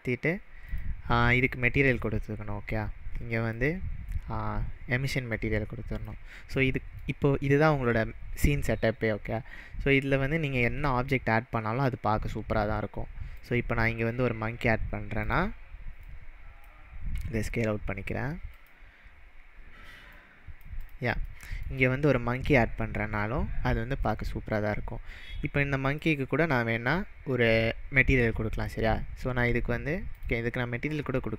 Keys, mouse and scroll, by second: 0.7 click, 1.4 click, 1.9 click, 3.5 click, 5.9 click, 6.5-7.1 middle drag, 9.5-10.3 scroll up 2, 10.6 shift+a, 13.3 click, 15.2 click, 17.1 s, 18.5 click, 19.1-20.1 scroll up 3, 20.1 scroll up 1, 20.1-20.7 click, 20.8 click, 21.3-21.8 middle drag, 24.0 click, 25.8-27.7 drag, 27.6 scroll down 1, 28.5-30.2 drag.